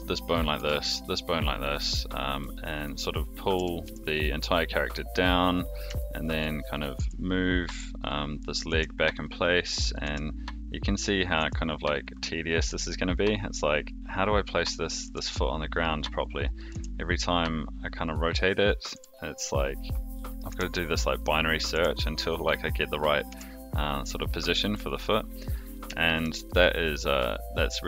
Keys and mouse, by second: 0.5 r, 2.8 click, 3.5 g, 5.9-6.3 shift+middle drag, 6.8 click, 6.9 r, 8.6 click, 8.6 r, 9.9 click, 10.0 r, 11.2 click, 12.6 r, 14.8 click, 15.0 r, 16.7 r, 18.3 click, 18.9 r, 20.2 click, 20.5 r, 21.5 click, 21.7 r, 23.2 click, 23.2 r, 26.0 shift+middle drag, 26.4-27.8 middle drag.